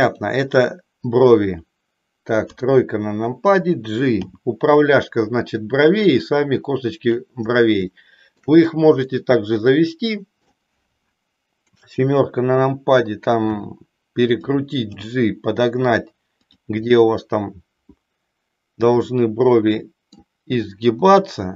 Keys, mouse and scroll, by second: 2.4 KP_3, 4.3 g, 7.1 click, 7.9 shift+middle click, 9.3-10.6 middle drag, 11.6 KP_7, 13.5 r, 14.7 g, 16.5 click, 16.9-20.1 middle drag, 21.0 r.